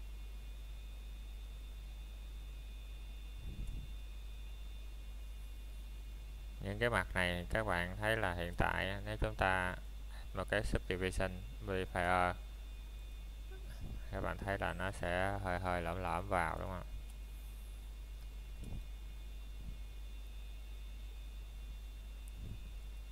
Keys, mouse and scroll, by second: 2.6 c, 2.8 middle click, 5.2 right click, 5.5 scroll down 1, 5.7 middle click, 6.2 scroll down 1, 6.5 middle click, 6.8 shift+middle click, 7.2 scroll up 1, 7.7 c, 8.2 middle click, 14.2 right click, 14.5-14.8 scroll down 1, 14.8 middle click, 16.2-16.7 scroll up 1, 16.7 middle click, 22.5 scroll down 1, 22.8 middle click.